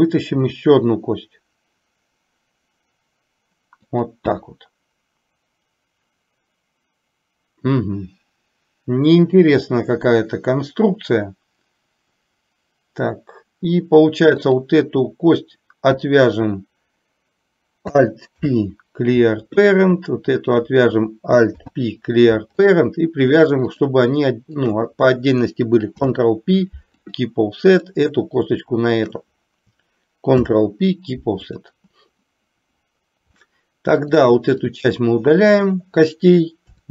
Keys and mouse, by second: 0.5 e, 18.5 alt+p, 20.4 click, 23.8 click, 24.8 shift+click, 26.0 ctrl+p, 29.0 click, 30.4 ctrl+p, 33.5 middle click, 34.9 click, 36.7 Delete.